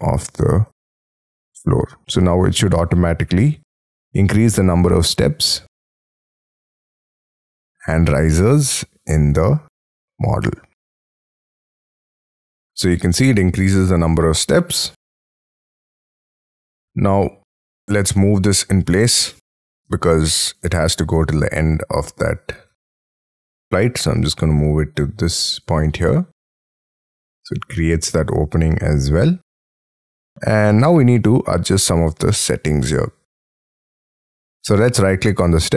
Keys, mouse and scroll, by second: 12.4 scroll down 6, 12.9 middle click, 17.7-18.9 scroll up 15, 19.0 m, 19.2 middle click, 19.4 scroll down 4, 19.7 ,, 20.8-21.2 scroll down 4, 21.9 shift+scroll down 1, 22.3 shift+scroll up 4, 25.6 shift+click, 26.2 scroll down 5, 26.5 middle click, 29.5 space, 30.0 scroll up 5, 30.3 middle click, 33.9-34.3 scroll down 5, 34.4 middle click, 34.7 right click.